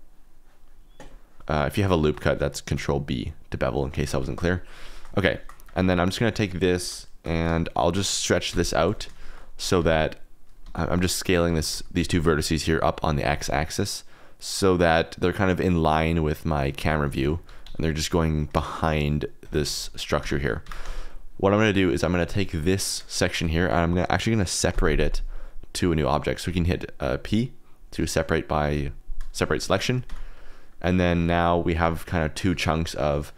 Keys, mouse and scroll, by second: 1.4 ctrl+r, 1.4 click, 1.9 shift+middle click, 2.6 ctrl+b, 3.9 Escape, 4.3 ctrl+z, 4.9 click, 5.3 shift+click, 5.7 1, 5.9 click, 6.7 KP_0, 7.6 shift+click, 8.4 n, 9.1 shift+click, 9.5 s, 9.7 x, 10.6 Escape, 11.4 s, 11.7 x, 12.1 Escape, 13.2 s, 13.4 x, 17.0 alt+z, 17.4 s, 17.6 x, 19.4 shift+click, 19.7 alt+z, 20.2 Tab, 20.6 Tab, 20.8 3, 21.0 click, 21.5 click, 24.7 p, 30.0 Tab, 30.3 click, 31.1 g, 31.8 Escape, 32.2 click, 32.5 g.